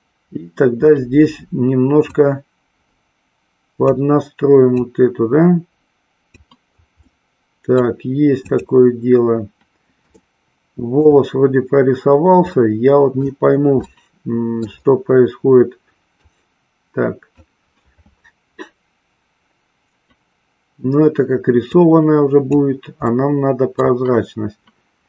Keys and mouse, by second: 2.0-4.0 drag, 4.9-6.4 drag, 7.0-8.0 middle drag, 8.5 click, 10.3 shift+middle click, 12.6 middle click, 13.9-14.9 shift+middle drag, 16.5-18.8 drag, 21.9 click, 23.1 middle click.